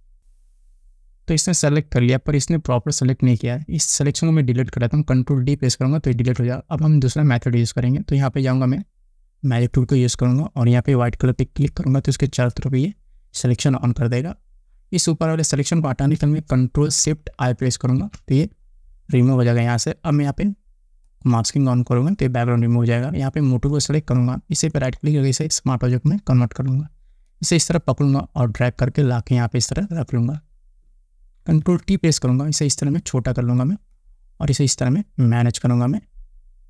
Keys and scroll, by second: 6.1 ctrl+d, 17.9 ctrl+shift+i, 31.4 ctrl+t.